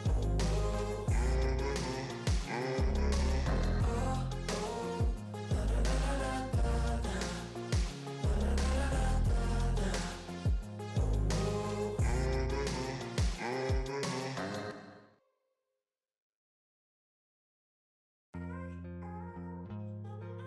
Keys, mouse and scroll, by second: 1.0 click, 2.5 ctrl+v, 4.2 click, 5.4 ctrl+c, 6.1 click, 7.5 ctrl+v, 7.7 Return, 10.2 click, 11.8 click, 12.5 4, 13.2 click, 14.0 7, 14.2 ctrl+s, 15.3 click, 16.7 click, 19.5 click.